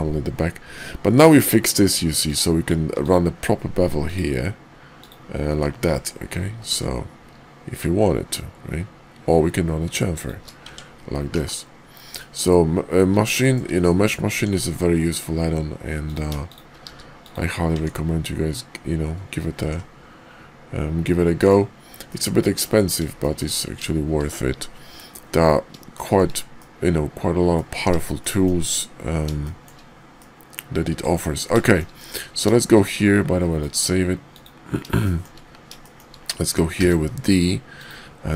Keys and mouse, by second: 2.2 click, 6.3 ctrl+b, 10.6 Tab, 11.3 /, 12.1 middle click, 13.3 shift+drag, 14.3 Tab, 16.0 click, 16.8 q, 17.7 Tab, 19.6 alt+x, 22.0-22.6 middle drag, 23.2 shift+middle click, 25.9-26.2 shift+middle drag, 26.6-27.6 middle drag, 28.1 shift+middle click, 29.4 shift+middle click, 30.1 middle click, 31.6 shift+middle click, 32.0 KP_5, 33.6-34.6 drag, 35.0 shift+middle click, 35.8 shift+middle drag, 36.7 d.